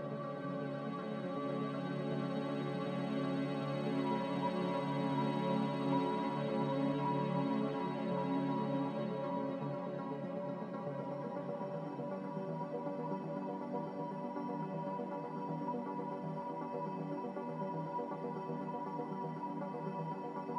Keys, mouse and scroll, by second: 1.3-2.1 typing, 2.4 Return, 3.3 z, 5.3 Delete, 9.9 g, 10.1-10.4 scroll down 1, 20.0 z.